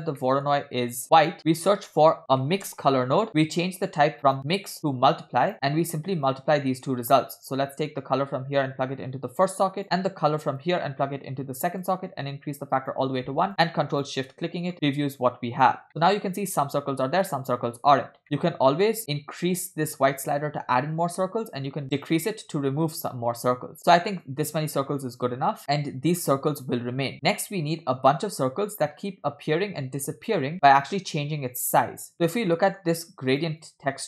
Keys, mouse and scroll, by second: 0.2 middle click, 1.0-1.4 drag, 1.0 scroll up 4, 1.4 scroll down 2, 1.5 middle click, 1.8 shift+a, 3.7-4.3 scroll up 3, 3.9 middle click, 4.3-5.5 drag, 5.5 middle click, 5.5 scroll down 1, 6.0 click, 6.7 middle click, 6.7 scroll down 2, 7.8-9.8 drag, 10.6-11.9 drag, 12.3-13.0 drag, 13.6 click, 14.2 ctrl+shift+click, 14.9 middle click, 15.2-15.8 drag, 15.9 middle click, 17.3-17.7 middle drag, 18.1-18.5 scroll up 3, 18.4 middle click, 19.0-24.4 drag, 25.7-26.1 scroll down 2, 26.3 scroll up 2, 32.1-32.6 scroll down 3, 32.5 middle click, 33.4 click, 33.6 click.